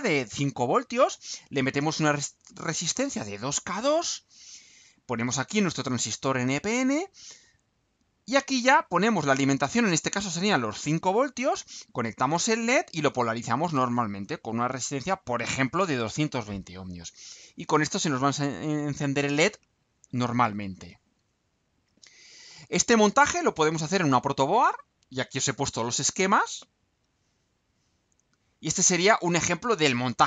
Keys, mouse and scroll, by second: 20.7-21.3 scroll down 2, 21.5-22.2 scroll down 2, 22.8-23.4 scroll down 2, 24.9 scroll down 2, 26.8-27.3 scroll down 2, 27.4-28.3 scroll down 4, 28.5 scroll down 2.